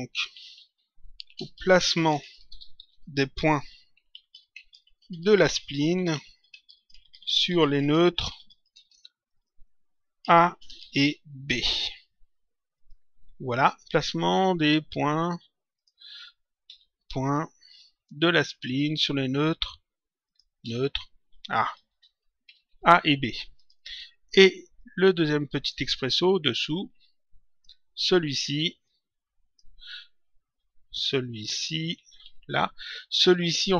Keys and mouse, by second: 0.4-2.8 typing, 3.9-8.8 typing, 10.4-11.4 typing, 12.7 click, 15.6 click, 16.6 s, 20.2 click, 20.6 s, 21.8 BackSpace, 22.4 Right, 22.6 s, 23.5 click, 24.9 ctrl+click, 26.5 click, 28.7 click, 31.4 Home, 31.9 shift+End, 32.1 Delete.